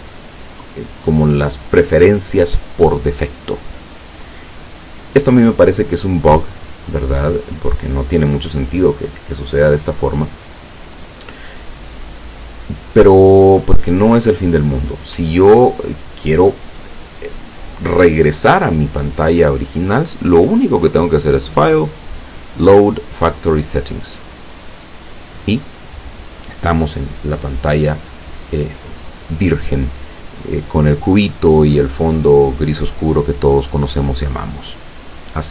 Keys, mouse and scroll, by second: 21.0 click, 24.3 click.